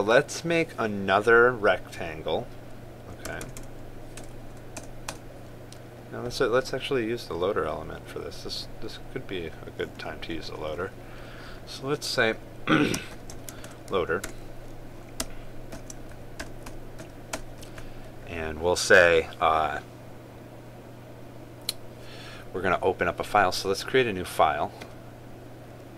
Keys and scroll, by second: 14.3 ctrl+space.